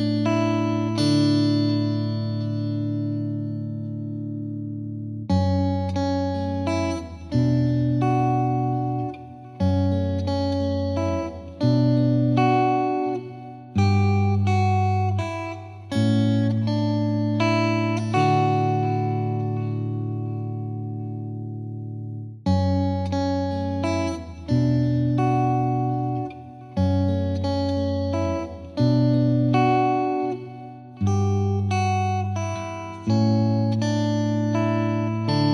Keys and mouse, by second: 0.1 click, 1.4 right click, 1.7 click, 2.7 click, 3.2 click, 4.7 click, 5.7 click, 6.9 F10, 7.7 click, 8.1 click, 11.4 click, 11.7 F3, 11.8 F3, 12.4 click, 14.0 F3, 14.6 F2, 14.9 click, 15.2 click, 15.8 click, 15.9 alt+click, 16.3 Escape, 17.0 click, 18.2 click, 21.6 click, 21.6 ctrl+z, 22.3 Escape, 22.8 F2, 23.0 click, 23.4 click, 24.1 right click, 24.4 click, 25.3 click, 26.0 click, 26.7 click, 30.0 click, 30.5 click, 30.7 click, 31.1 click, 31.3 click, 31.7 click, 31.9 click, 32.3 click, 32.5 click, 33.3 click, 33.5 click, 33.9 click, 34.1 click, 34.5 click, 34.6 click, 34.9 click, 35.3 click, 35.4 click.